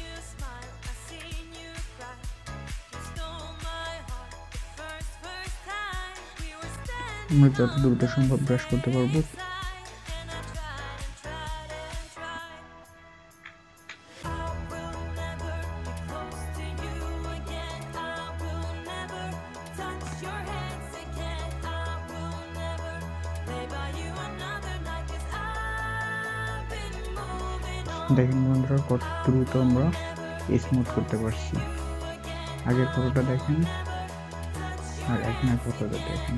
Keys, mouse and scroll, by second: 0.9 click, 1.1 typing, 12.6-13.7 typing, 12.6-13.2 scroll down 1, 13.2 scroll down 1, 19.3-19.8 scroll up 1, 19.8 scroll, 20.0 typing, 23.4 scroll up 1, 24.0 scroll up 1, 28.2 scroll down 1, 28.7 scroll, 28.9-29.8 alt+scroll down 1, 29.8-30.2 alt+scroll down 2, 30.6-31.6 alt+scroll down 1, 33.1 alt+scroll, 33.2 alt+scroll up 1.